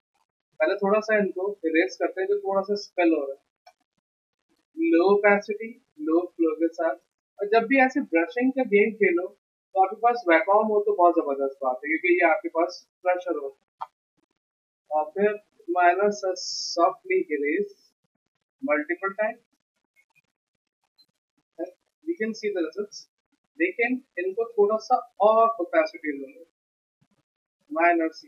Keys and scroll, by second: 1.4 e, 19.7 v, 22.9 z.